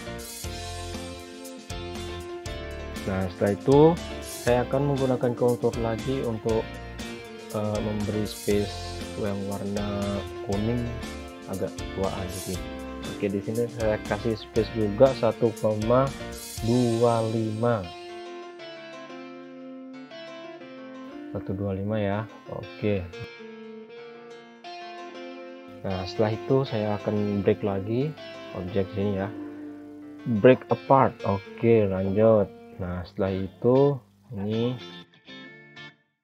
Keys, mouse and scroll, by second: 4.4 Return, 6.1-7.0 scroll down 1, 8.7-9.6 scroll up 1, 12.6 click, 14.0 1, 17.5 typing, 18.3 Return, 18.8 scroll down 1, 19.8 scroll up 1, 20.8-21.7 scroll up 1, 21.7-22.7 scroll down 1, 23.6 click, 26.4 click, 31.8 click, 35.4 ctrl+z.